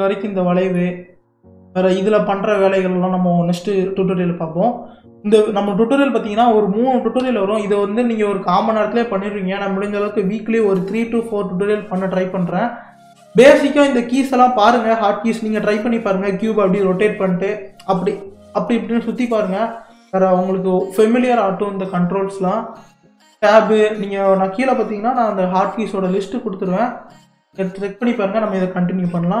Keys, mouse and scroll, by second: 0.8-1.4 middle drag, 1.4 scroll down 2, 5.7-7.2 middle drag, 7.2 KP_3, 28.0-29.4 scroll down 1.